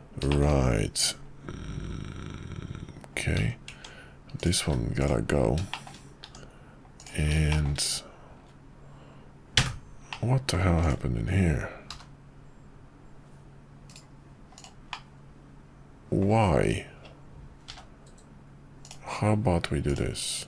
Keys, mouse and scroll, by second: 0.3 middle click, 0.4 scroll down 1, 3.7 Tab, 4.6 x, 5.7 shift+middle click, 5.9 scroll down 1, 6.2 Tab, 7.5 shift+middle click, 9.7 3, 10.2 middle click, 10.8 click, 12.0 g, 14.9-16.2 middle drag, 17.7 k.